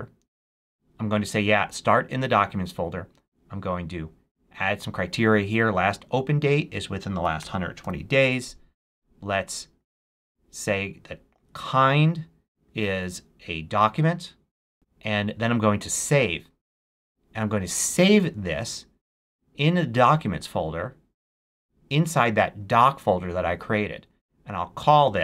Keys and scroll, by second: 6.9-8.2 typing.